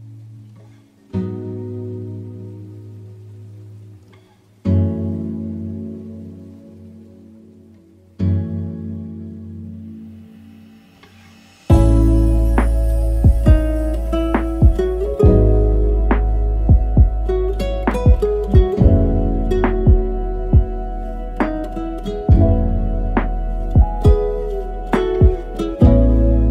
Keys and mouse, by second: 0.8-2.0 shift+drag, 2.3 shift+middle click, 3.7 click, 6.6-7.1 drag, 9.4 middle click, 11.7-14.2 shift+drag, 15.0 click, 16.3-17.1 drag, 19.0-19.4 drag, 21.2-23.6 drag, 25.2-25.8 middle drag.